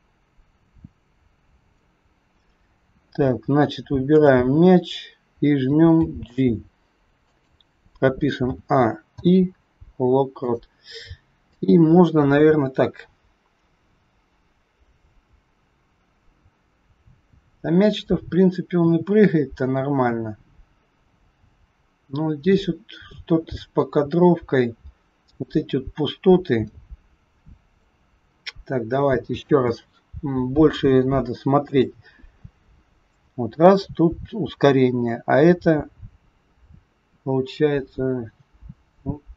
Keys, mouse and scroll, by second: 3.1 scroll up 2, 4.1 click, 4.1-5.9 scroll up 1, 5.9 g, 8.4 a, 9.0 i, 11.5 click, 23.8 click, 28.3-28.7 scroll down 4, 29.4 space, 30.4 scroll up 2, 31.7 click.